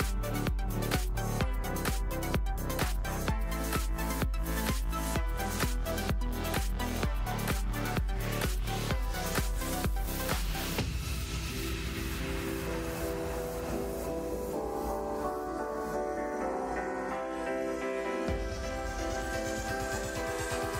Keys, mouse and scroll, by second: 11.1 click, 12.2 click, 14.0-15.7 drag.